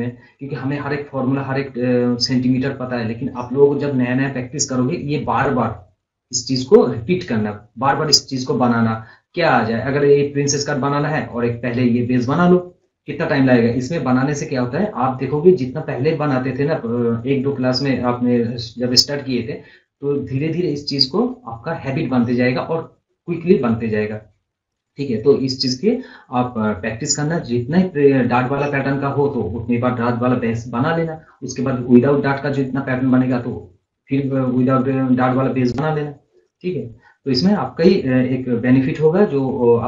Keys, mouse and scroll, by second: 6.3 scroll up 1, 6.8-7.9 scroll down 1, 8.1 scroll up 1, 11.0 scroll down 1, 12.1-15.3 drag, 24.4 scroll up 1, 24.7 scroll, 25.2 scroll up 1, 25.4 scroll down 1, 36.2 scroll up 1, 36.6 scroll down 1, 37.0 scroll up 1.